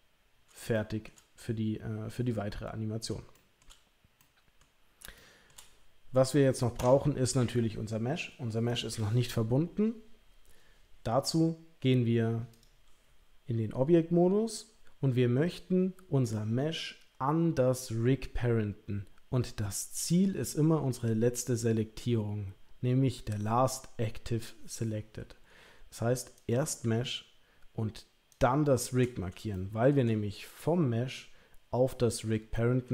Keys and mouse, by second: 0.7 shift+middle click, 3.3 shift+middle click, 4.2 middle click, 5.1 shift+middle click, 6.8 Tab, 8.7 click, 26.4 click, 29.6 shift+middle drag, 30.0-32.3 middle drag, 32.6 shift+middle drag.